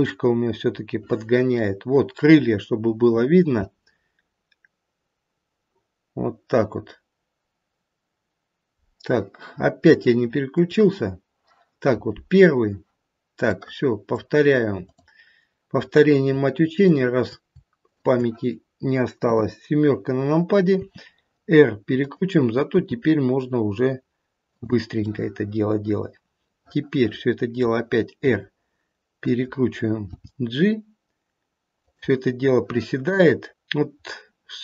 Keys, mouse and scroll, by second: 0.7 middle click, 1.2 middle click, 10.5 click, 13.5 middle click, 14.8 click, 16.8 shift+click, 17.8 shift+click, 19.2 KP_7, 20.7 r, 22.8 g, 25.0 middle click, 25.8-27.5 middle click, 27.3 middle click, 28.2 r, 30.0 g, 34.0-34.5 scroll up 2.